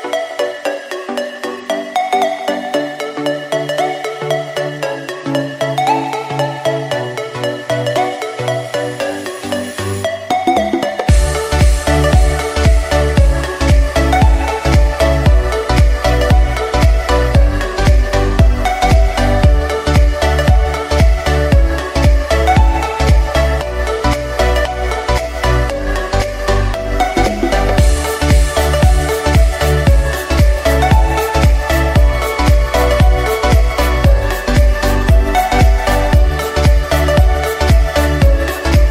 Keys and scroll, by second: 3.9 4, 4.4 Return, 7.8 o, 19.4 Escape, 37.3 Escape.